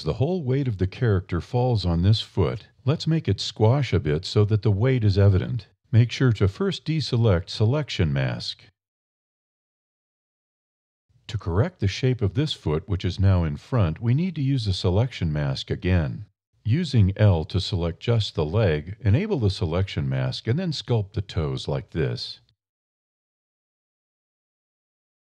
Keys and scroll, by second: 2.8 e, 4.1 d, 4.3 e, 6.5 e, 8.5 e, 17.0 alt+1, 19.0 e, 24.4 shift+e.